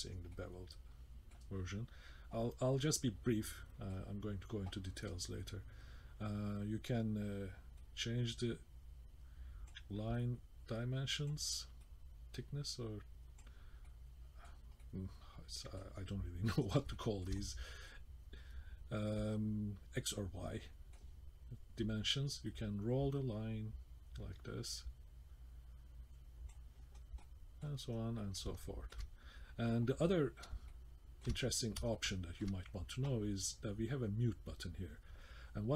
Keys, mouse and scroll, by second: 0.0 scroll down 2, 0.3-0.8 scroll up 1, 0.8 middle click, 3.2 scroll down 1, 3.5 middle click, 7.8 click, 10.1 click, 11.8 click, 13.8 middle click, 14.8 middle click, 16.0-16.7 scroll up 1, 16.7 scroll down 1, 16.9 shift+middle click, 17.4 middle click, 20.5 middle click, 22.4 click, 27.0 scroll down 1, 27.2 middle click, 27.8-28.2 scroll down 1, 28.2 middle click, 28.6 shift+middle click, 30.7 shift+middle click, 31.9 shift+middle click, 33.6-34.4 scroll up 2.